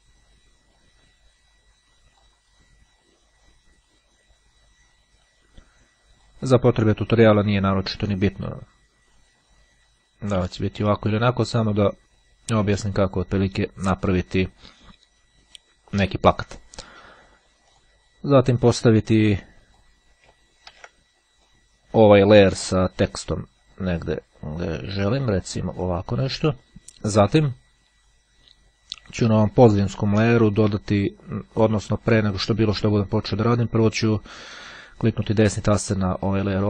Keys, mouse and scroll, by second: 0.3 click, 0.9-2.9 drag, 3.2-6.9 drag, 11.3-13.3 drag, 17.7 click, 18.9-20.2 drag, 20.9 ctrl+z, 22.5-27.1 drag, 29.7 click, 30.9 click, 31.7 click, 35.2 right click.